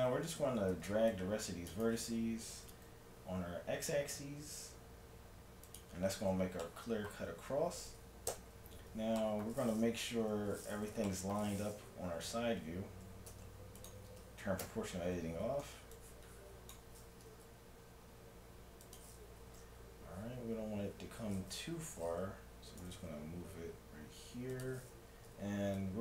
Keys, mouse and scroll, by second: 0.5 z, 0.9 c, 2.5 g, 6.3-6.7 scroll up 1, 6.7 middle click, 7.3 z, 8.3 KP_3, 10.2 z, 13.3 ctrl+Tab, 14.7 o, 15.4 a, 15.9-17.7 drag, 17.2 g, 19.4 a, 20.3 a, 20.7 a, 21.8 a, 22.8 g, 25.3 a, 25.3 c.